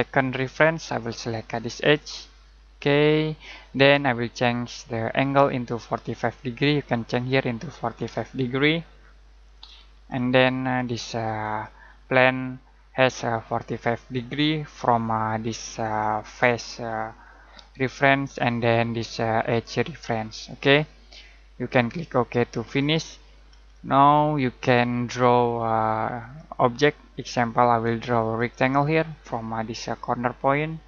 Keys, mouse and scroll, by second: 1.9 click, 5.2 click, 6.4 click, 8.8-9.5 typing, 9.5 click, 10.1 middle click, 20.4 middle click, 22.7 click, 23.2 click, 23.7 middle click, 26.2 click.